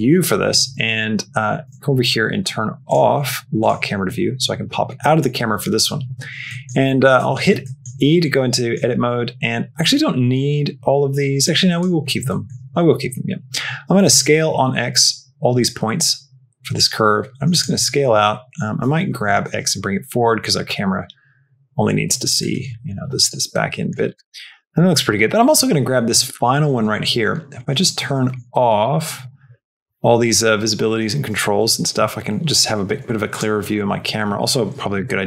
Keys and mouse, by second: 0.0 click, 3.5 click, 4.1 middle click, 4.9 middle click, 5.9 n, 6.4 middle click, 7.1 Tab, 7.5 shift+middle click, 8.6 middle click, 11.5 click, 12.1 shift+middle click, 13.9 s, 18.7 g, 22.6 shift+middle click, 23.4 middle click, 24.4 middle click, 27.8 middle click, 28.7 click, 29.5 click, 31.5 n, 33.2 click, 33.6 click, 34.9 Tab.